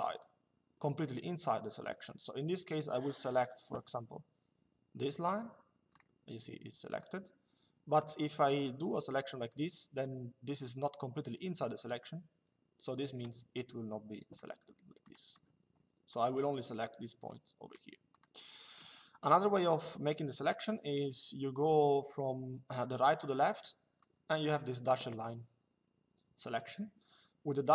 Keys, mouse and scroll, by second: 6.6 click, 7.7 click, 14.8 click, 23.7 click.